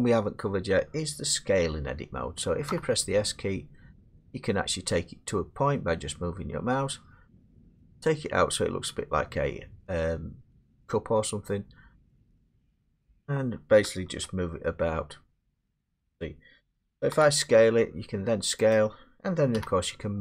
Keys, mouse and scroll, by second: 2.7 s, 13.0 click, 15.5 ctrl+z, 17.1 s, 18.7 click, 19.6 g.